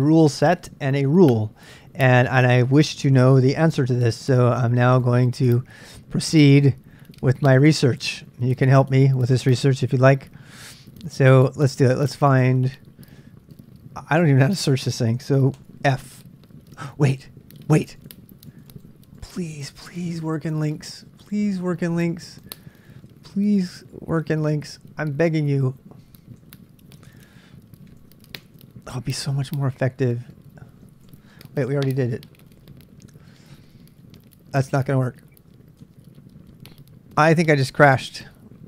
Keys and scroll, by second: 4.2 super+Tab, 5.0 super+Tab, 15.5 ctrl+f, 23.1 super+Tab, 26.4 q, 27.1 super+Tab, 27.2 super+Tab, 27.9 super+Tab, 28.5 super+Tab, 30.4-31.7 typing, 37.5 Return.